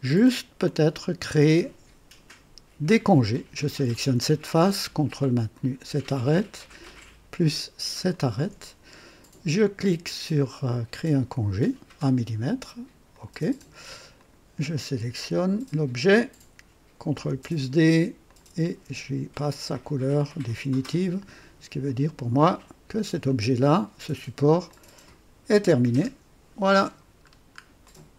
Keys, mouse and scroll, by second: 0.1 scroll up 2, 0.6-1.3 drag, 2.8 click, 5.5 ctrl+click, 6.1-7.0 ctrl+drag, 8.1 ctrl+click, 10.8 click, 13.0 click, 14.1 click, 17.1 ctrl+d, 18.2 click, 19.6 click, 20.6 click, 21.8 click, 22.4 click, 23.2-24.6 drag, 24.7 click, 25.6 click, 25.9 space, 26.6 click, 27.2 scroll down 1, 27.8 right click.